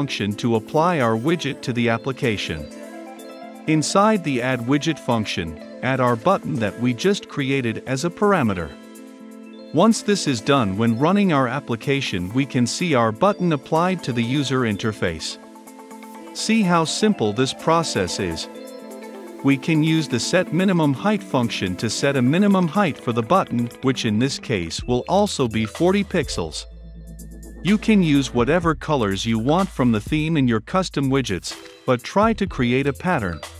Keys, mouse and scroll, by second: 4.6 Return, 5.1 >, 5.3 a, 5.5 d, 6.4 Down, 7.2-9.5 typing, 7.6 Return, 9.7 Return, 10.0 ctrl+F5, 11.5-18.2 drag, 18.2 Return, 18.3-19.9 typing, 18.5 Return, 19.3 Return, 21.0 m, 21.1 n, 21.2 i, 21.5 Return, 21.8 shift+9, 22.8 ctrl+F5, 24.3-31.8 drag, 31.8 p, 31.9 i, 32.1 n, 32.3 k, 32.9 ctrl+F5.